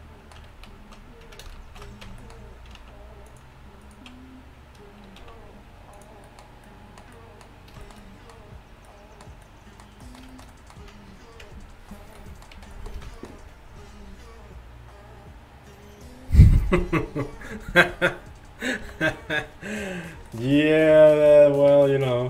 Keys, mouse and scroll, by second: 0.7 ctrl+z, 1.7 ctrl+shift+z, 2.1 Tab, 2.8 ctrl+Tab, 5.3 x, 11.5 Tab, 12.1 a, 12.8 a, 18.9 KP_1.